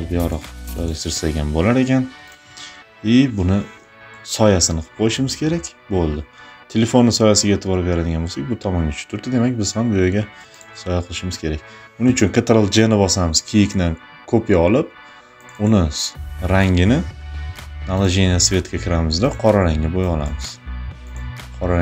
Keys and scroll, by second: 12.2 ctrl+j.